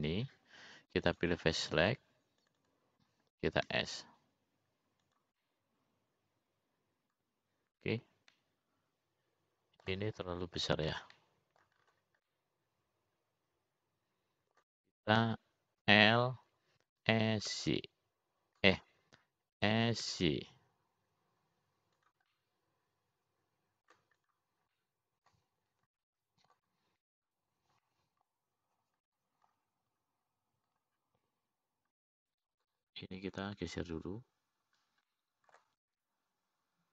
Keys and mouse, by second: 0.3 ctrl+r, 3.1 click, 4.4 click, 4.7 click, 5.6 s, 7.4-12.1 middle drag, 12.5 middle click, 13.2 middle click, 14.6-17.0 middle drag, 18.3 l, 19.4 s, 21.9 s, 24.8-26.3 middle drag, 26.6 click, 27.1 middle click, 28.4 middle click, 30.3 middle click, 31.6 middle click, 34.4 middle click, 35.8 click.